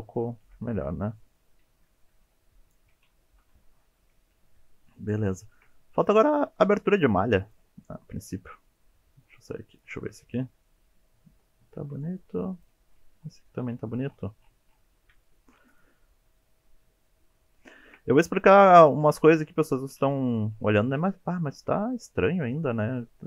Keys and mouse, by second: 0.0 middle drag, 0.4 alt+z, 0.7-1.4 middle drag, 2.0 middle drag, 2.9 KP_1, 3.4 KP_3, 4.9 shift+middle click, 5.4 shift+middle click, 5.7 middle click, 7.4 click, 8.6 middle click, 9.0 Tab, 9.3 middle click, 9.7 click, 9.9-10.3 middle drag, 10.4 Tab, 10.7-11.7 middle drag, 11.8 Tab, 12.0 middle drag, 15.3 shift+middle drag, 15.7 middle click, 16.5 shift+middle click, 16.7 shift+middle drag, 16.8-17.5 middle drag, 17.7 shift+middle drag, 19.0 KP_3, 19.9 KP_1, 21.1 shift+middle click, 22.8 shift+middle drag.